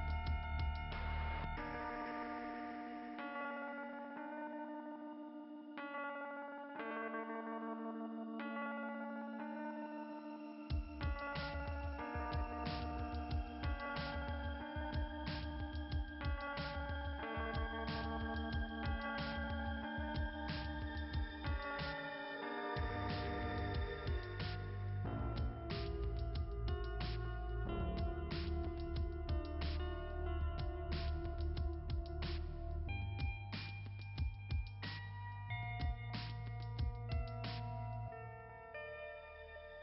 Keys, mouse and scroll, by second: 0.8 click, 8.1 click, 11.2 click, 13.9 click, 18.6 click, 22.2-23.6 typing, 24.8 click, 28.0 click, 28.9 click, 32.8 click, 34.5 click, 38.8 alt+[, 39.0-39.4 typing, 39.2 alt+[.